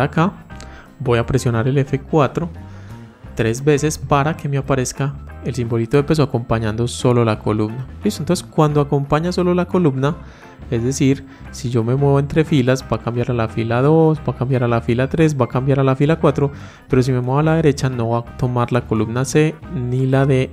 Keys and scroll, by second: 1.5 F4.